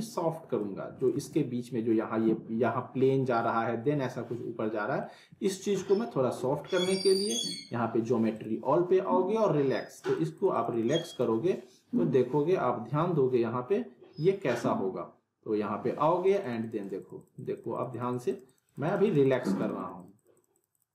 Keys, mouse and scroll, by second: 0.8 alt+w, 1.1 alt+right click, 4.7 scroll up 1, 5.0-5.6 alt+middle click, 5.6 scroll down 1, 5.8-6.5 alt+middle click, 8.3 click, 11.6-12.2 alt+middle click, 12.3 scroll up 1, 12.6-13.2 alt+middle drag, 16.3 click.